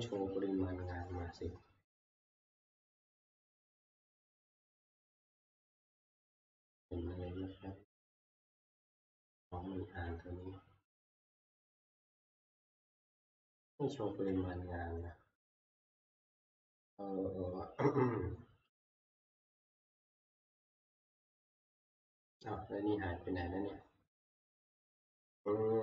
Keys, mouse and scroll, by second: 7.5-7.8 scroll down 2, 9.9 scroll, 13.9 click, 14.1 F2, 15.7 Escape, 18.9 click, 20.8-24.0 drag.